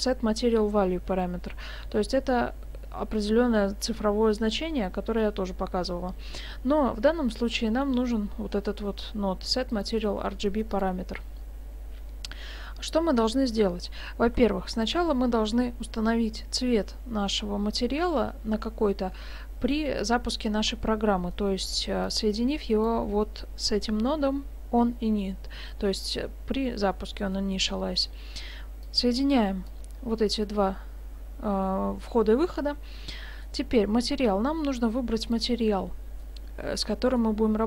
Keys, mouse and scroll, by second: 12.6 scroll down 2, 14.3 g, 20.7 scroll up 1, 21.3 middle click, 21.3 scroll up 2, 22.1 click, 27.3 middle click, 28.8 click, 33.1 middle click, 34.8 click, 35.7 middle click, 36.6 scroll down 1, 36.8 middle click.